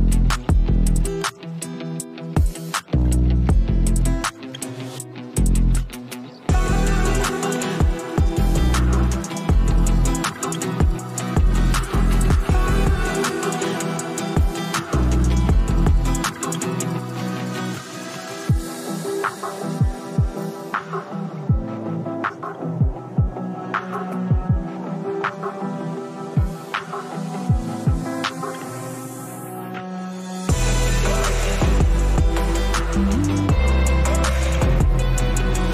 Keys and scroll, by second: 11.5 space, 19.0 typing, 24.5 space, 30.7 [, 31.1 [, 31.2 [, 31.4 [, 33.5 space.